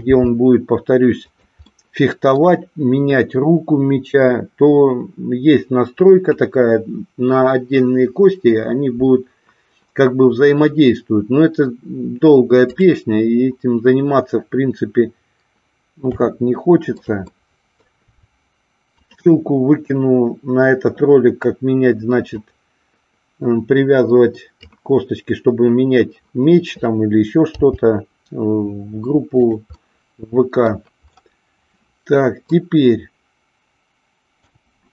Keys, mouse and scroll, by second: 0.1 g, 1.4 click, 1.6-2.4 scroll up 1, 16.0 r, 17.0 click, 17.4 middle click, 19.0 click, 22.4-24.6 drag, 27.5 g, 29.5 click, 29.7-30.7 middle drag, 31.7 middle click, 34.4 g.